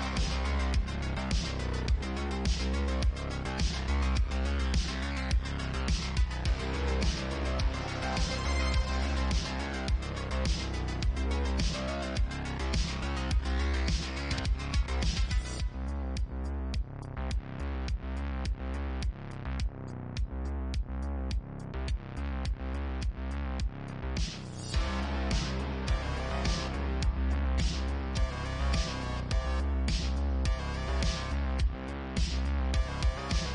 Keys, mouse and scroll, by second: 2.7 e, 8.4 g, 10.3 shift+middle click, 11.0 click, 11.1-13.7 middle drag, 11.1 g, 12.8 Tab, 13.7 Tab, 14.4 click, 15.0 Tab, 15.9 Tab, 16.4 click, 17.5 ctrl+click, 18.5 u, 19.6 i, 22.0 ctrl+z, 22.5 ctrl+z, 23.1 ctrl+z, 23.4 ctrl+z, 23.7 ctrl+z, 24.0 ctrl+z, 24.4 ctrl+z, 24.7 ctrl+z, 24.9 ctrl+z, 25.2 ctrl+z, 25.6 ctrl+z, 26.3 Tab, 26.8-27.1 middle drag, 27.1 click, 27.1-29.6 middle drag, 28.5 ctrl+a, 29.6 click, 30.0 Tab, 31.8 s, 32.9 i.